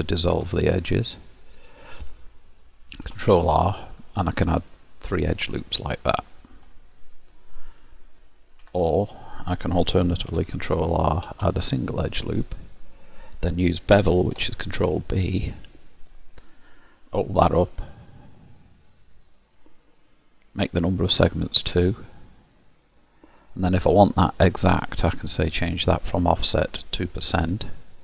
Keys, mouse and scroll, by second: 0.0 ctrl+x, 3.0 ctrl+r, 6.0 middle click, 8.6 ctrl+x, 10.3 ctrl+r, 11.9 middle click, 12.7-13.2 scroll down 1, 14.2 ctrl+b, 21.7 click, 23.6 middle click, 25.6 click.